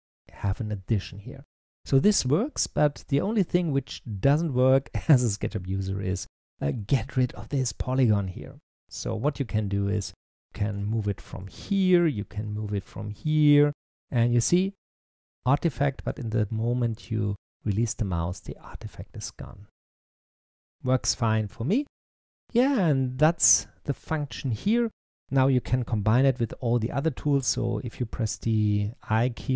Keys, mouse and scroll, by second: 2.4 z, 4.4 click, 10.9 middle click, 11.7 click, 12.5 click, 18.5-21.2 middle drag, 21.2-21.7 scroll down 2, 21.7-24.9 middle drag.